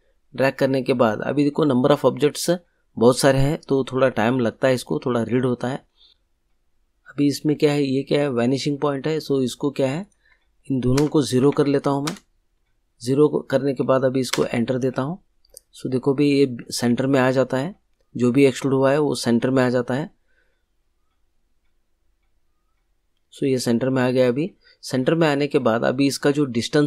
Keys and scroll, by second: 10.9 0, 11.6 Tab, 12.0 0, 14.3 Return.